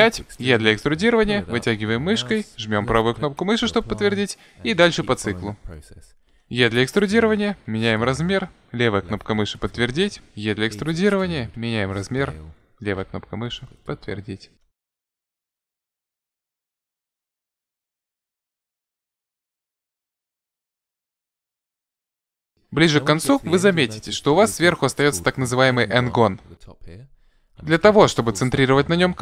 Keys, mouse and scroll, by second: 6.3 e, 7.7 s, 10.4 e, 12.1 s, 14.5-21.6 typing, 22.9-26.4 middle drag, 28.4 KP_Decimal.